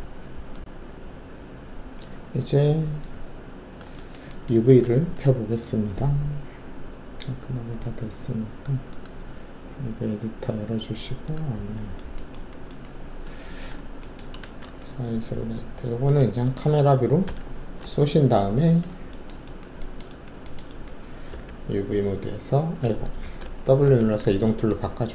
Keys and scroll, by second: 14.4 alt+shift+a, 17.2 ctrl+shift+c, 21.3 alt+4, 23.2 ctrl+z, 23.8 w.